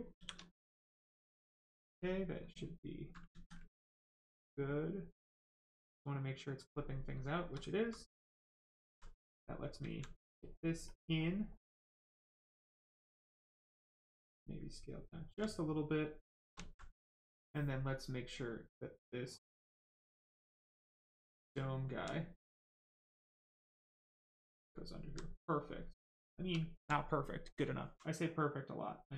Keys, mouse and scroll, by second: 0.1 shift+f, 0.5 right click, 2.4 click, 3.3 ctrl+z, 3.8 click, 6.9 right click, 9.1 right click, 9.9 alt+right click, 10.9 click, 10.9 click, 12.5 right click, 13.7 click, 13.9 alt+click, 15.5 alt+right click, 15.6 right click, 16.2 shift+right click, 16.6 alt+right click, 17.0 right click, 17.1 right click, 18.4 click, 20.0 right click, 22.6 click, 24.2 right click, 24.8 alt+right click, 25.2 right click, 25.3 right click, 26.1 shift+right click, 26.8 alt+right click, 27.6 alt+right click, 28.1 right click, 28.2 right click.